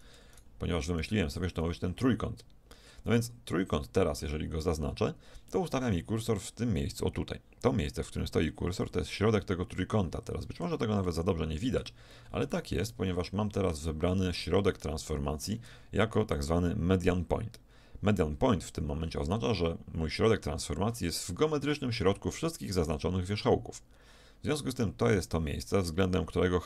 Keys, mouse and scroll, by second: 0.0 click, 1.7 middle click, 1.8 click, 1.9 middle click, 2.0-3.3 drag, 3.3 middle click, 3.5 middle click, 5.5-7.3 middle drag, 9.4-10.7 middle drag, 12.7-13.8 middle drag, 16.4-18.7 drag.